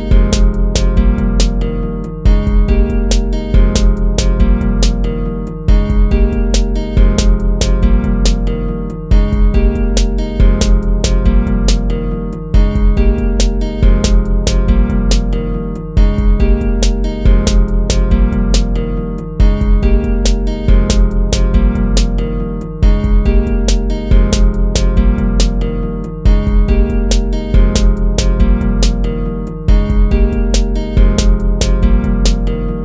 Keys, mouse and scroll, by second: 2.4 ctrl++, 6.1 ctrl+-, 6.5 ctrl++, 11.3 ctrl+-, 11.6 ctrl++, 12.1 ctrl+-, 12.6 ctrl++, 13.5 ctrl++, 13.8 ctrl++, 16.1 ctrl+z, 22.2 ctrl+-, 22.6 ctrl+-, 23.0 ctrl++, 23.3 ctrl++, 30.7 ctrl+-.